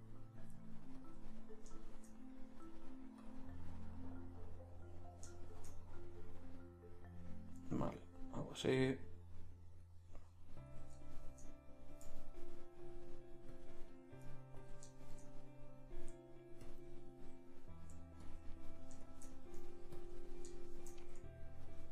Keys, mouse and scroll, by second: 8.0-10.7 drag, 10.7-12.3 middle drag, 12.8-14.1 middle drag, 15.1-19.8 middle drag.